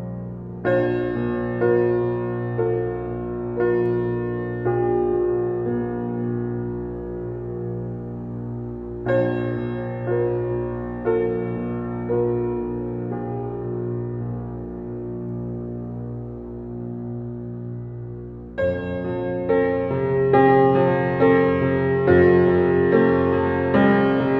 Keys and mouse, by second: 0.0 click, 1.6-2.3 drag, 2.4 click, 3.9 click, 5.2-7.3 typing, 9.8-10.5 typing, 11.6 Return, 13.7 click, 14.9-16.4 typing, 18.3 click, 20.3 click, 20.8-21.9 typing, 21.9 click, 24.0 click.